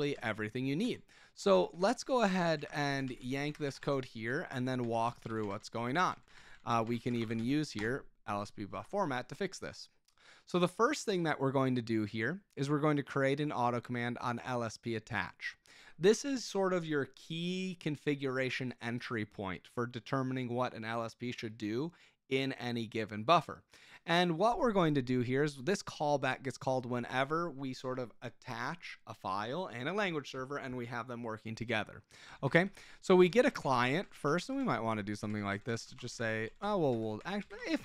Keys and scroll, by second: 1.4 Return, 1.6-8.2 typing, 6.1 Escape, 32.2 Escape, 32.5-37.8 typing.